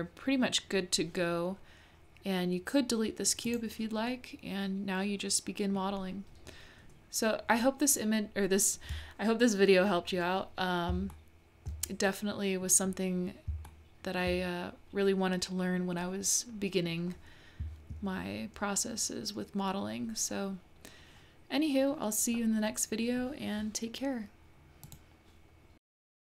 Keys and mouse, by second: 3.4 click, 4.2 click, 4.6-6.0 middle drag, 11.1-11.7 shift+middle drag, 12.1 middle click, 13.7 shift+click, 13.9 shift+middle click.